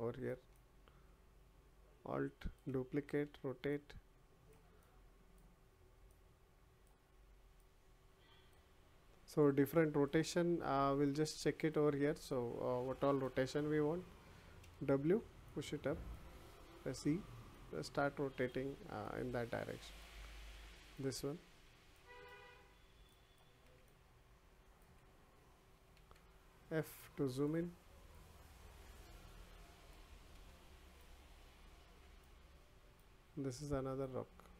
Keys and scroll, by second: 3.1 e.